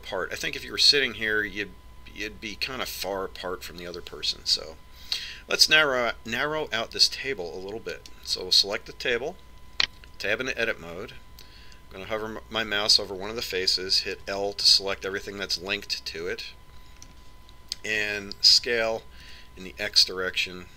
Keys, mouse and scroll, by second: 0.6 click, 9.7-11.7 right drag, 11.8 Tab, 16.1 l, 17.0-18.9 middle drag, 20.4 s.